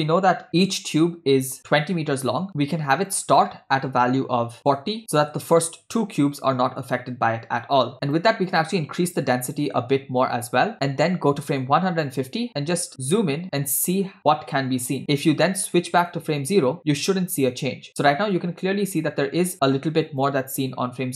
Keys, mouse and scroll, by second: 8.1-10.0 drag, 11.8 click, 13.1 scroll up 4, 14.2-15.0 scroll up 5, 15.9 click, 19.0 click, 20.3 click.